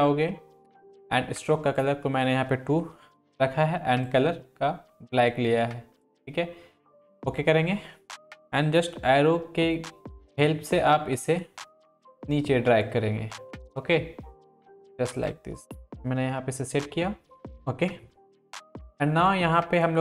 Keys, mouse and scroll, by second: 9.0 Down, 10.3 Left, 11.4 Up, 13.3 Right, 15.1-16.9 drag, 16.9 Right.